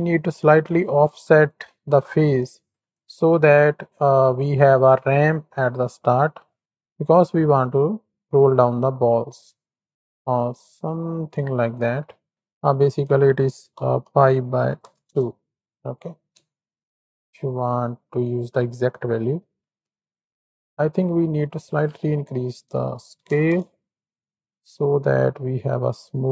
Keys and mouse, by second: 0.0 shift+click, 3.0 ctrl+click, 6.6-11.8 shift+drag, 13.0-15.0 drag, 16.3 ctrl+KP_1, 16.9 ctrl+KP_3, 20.0-20.6 middle drag, 21.0 middle click, 22.0 middle click, 22.6 click, 24.2-25.4 drag, 26.2 click.